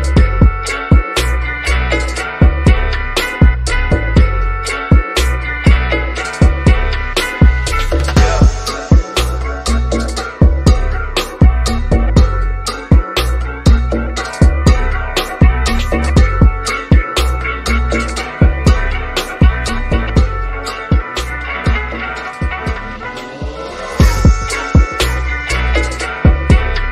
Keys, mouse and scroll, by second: 1.1 Return, 2.1 scroll down 1, 2.4-4.8 shift+middle drag, 4.8-5.3 scroll up 1, 5.8 click, 11.1 2, 12.3 Return, 13.1-13.5 scroll down 1, 13.6-16.3 shift+middle drag, 16.3 click, 19.0 5, 19.7 Return, 20.9-24.3 shift+middle drag, 24.3 click.